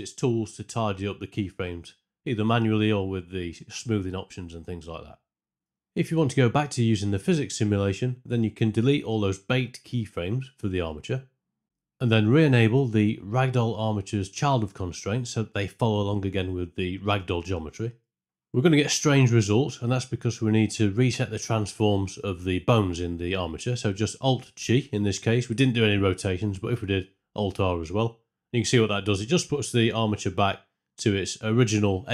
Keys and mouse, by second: 2.1-5.4 drag, 5.5 ctrl+space, 5.6 shift+Left, 7.8 shift+Left, 9.4 a, 10.0 x, 11.0 space, 11.7 shift+Left, 11.7 space, 18.2 space, 19.8 space, 20.1 shift+Left, 22.8 alt+g.